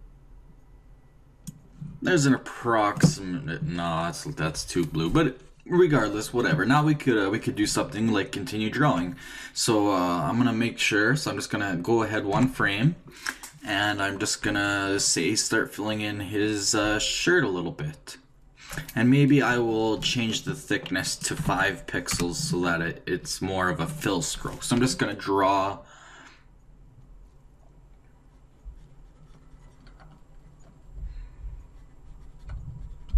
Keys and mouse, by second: 7.6-8.9 d, 12.3 Right, 14.4-18.7 d, 21.0-22.6 drag, 24.7-27.4 d, 27.4-29.3 drag.